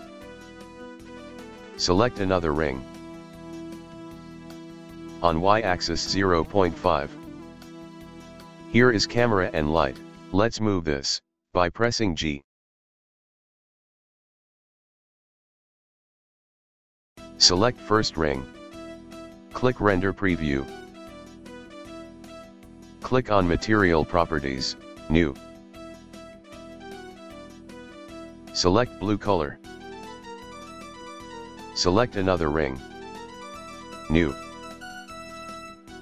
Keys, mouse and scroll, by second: 2.2 click, 5.0-8.2 drag, 8.2 scroll up 1, 9.3 click, 10.7 g, 12.7 click, 13.1 g, 17.0 click, 20.0 click, 23.5 click, 25.0-27.0 drag, 30.0 click, 31.8 click, 34.0-36.0 drag.